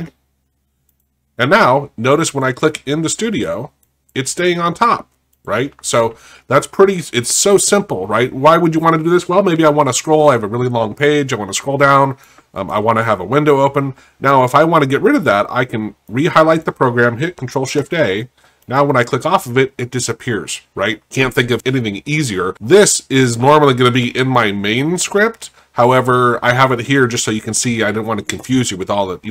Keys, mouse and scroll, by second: 2.7 click, 3.8 click, 4.5 click, 5.3 click, 12.3 click, 16.1 click, 20.2 click, 22.5 click.